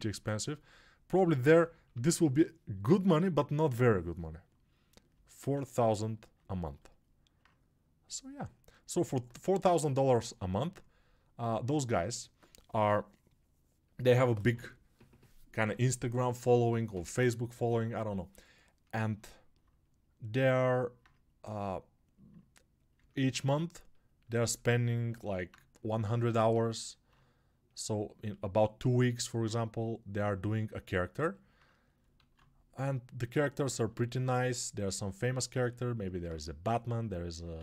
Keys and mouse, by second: 1.0 g, 1.5 ], 32.1 alt+q, 34.0-37.6 drag, 36.2 2, 37.5 alt+q, 37.5 alt+w.